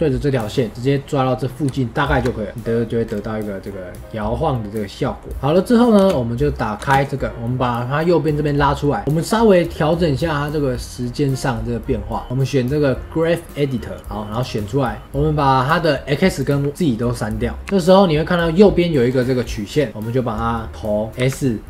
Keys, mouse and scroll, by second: 1.6-2.5 shift+middle drag, 2.5 space, 3.0-3.3 scroll down 3, 3.3-5.3 middle drag, 5.3 click, 5.9 space, 6.7 space, 8.4-14.0 drag, 14.2-17.6 drag, 17.6 space, 20.2-21.1 scroll up 2.